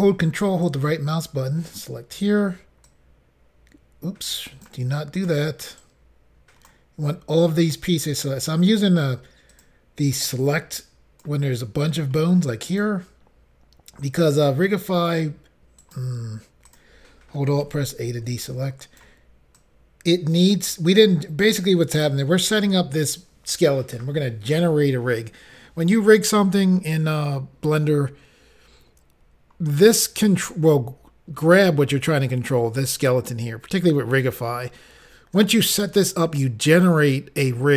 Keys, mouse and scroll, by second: 0.6 click, 0.6 ctrl+right click, 2.8 click, 4.4 right click, 5.1 click, 5.8 ctrl+right click, 7.3 click, 9.5 click, 9.6 click, 10.3 click, 12.2 ctrl+right click, 14.2 click, 15.8 right click, 16.7 click, 17.6 alt+a, 18.4 ctrl+right click, 19.6 click, 21.0 click.